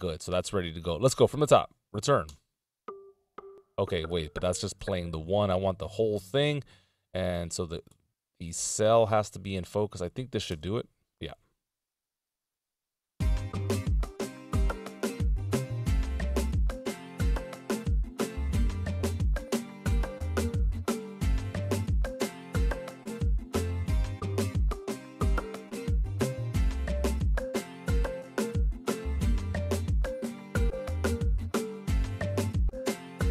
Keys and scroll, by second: 2.2 Return, 4.7 super+Return, 6.4 Down, 7.9 Right, 8.4 Left, 10.5 Left, 10.6 Return, 30.1 Right, 30.7 Left, 31.5 Right, 32.3 Left.